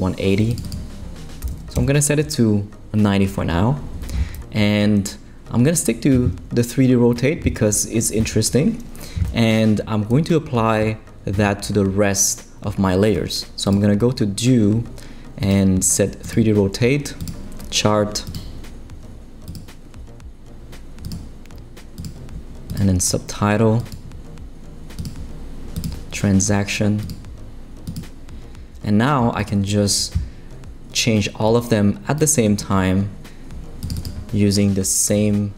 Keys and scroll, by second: 1.2-2.0 typing, 35.1 9.